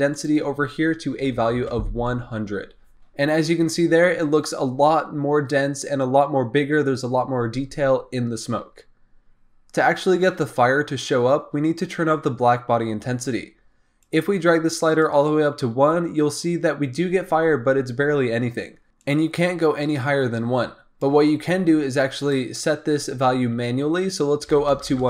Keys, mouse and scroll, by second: 0.1-1.5 drag, 1.5 KP_0, 14.0-24.8 drag, 24.8 KP_0.